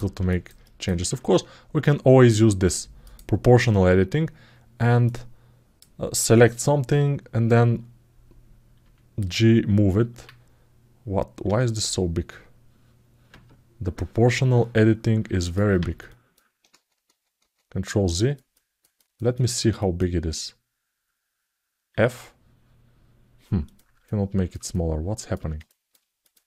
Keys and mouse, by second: 0.0 alt+shift+middle click, 0.4 alt+middle click, 2.8 click, 4.8 click, 15.2 click, 15.8 ctrl+alt+middle click, 16.5 ctrl+z, 16.8 ctrl+z, 17.2 ctrl+z, 17.9 middle click, 18.3 middle click, 18.7 middle click, 19.1 middle click, 19.6 alt+shift+middle click, 23.4 click, 23.8 ctrl+alt+middle click, 24.5 alt+shift+middle click, 25.4 ctrl+alt+middle click, 26.0 click.